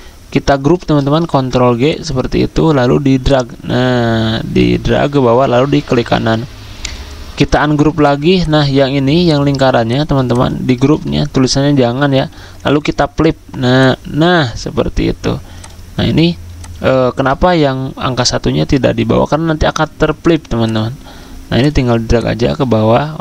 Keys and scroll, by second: 1.3 ctrl+g, 10.9 ctrl+z, 12.1 ctrl+g.